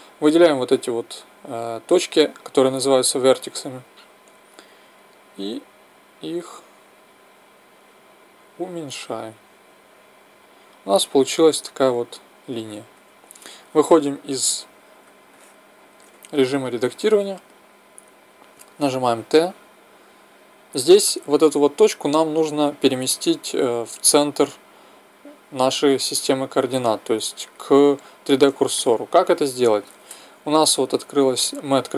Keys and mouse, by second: 4.6-7.8 drag, 9.0-12.7 drag, 13.0 Tab, 15.3-17.0 middle drag, 19.0 t, 26.9-31.9 middle drag.